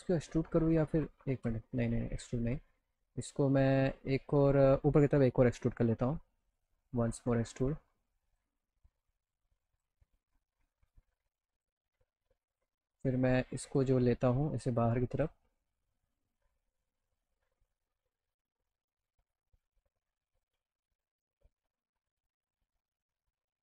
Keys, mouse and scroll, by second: 1.4 ctrl+z, 2.2 alt+middle click, 4.7 click, 4.9-5.3 scroll up 2, 5.6 alt+middle click, 6.6 right click, 6.9 right click, 7.5 right click, 8.3 click, 9.0 click, 10.1 right click, 10.9 click, 12.5 click, 13.3 click, 14.5 click, 15.4 alt+middle click, 19.3 click, 21.0 click, 21.9 click, 22.4 click, 23.3 click.